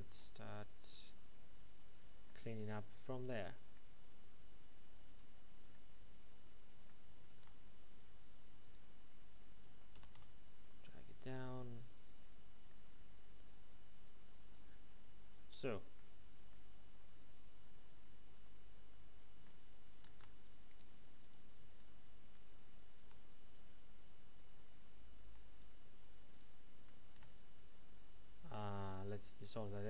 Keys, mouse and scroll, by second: 1.5 click, 2.2 middle click, 5.0 right click, 5.7 middle click, 7.3 ctrl+Tab, 7.9 click, 8.6 right click, 9.9 g, 12.1 click, 12.6 middle click, 20.0 ctrl+Tab, 20.6 click, 21.2 right click, 21.7 right click, 22.9 alt+m, 23.4 click, 25.5 shift+right click, 26.3 shift+right click, 27.1 x, 28.8 click.